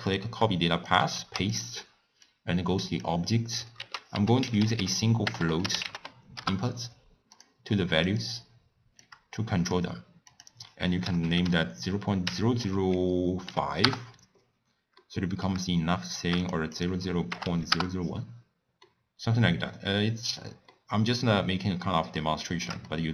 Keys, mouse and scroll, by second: 1.8 click, 3.3 click, 6.7 BackSpace, 8.3 click, 10.0-13.9 drag, 15.0-17.8 middle drag, 17.8-18.8 drag, 18.8-23.1 middle drag.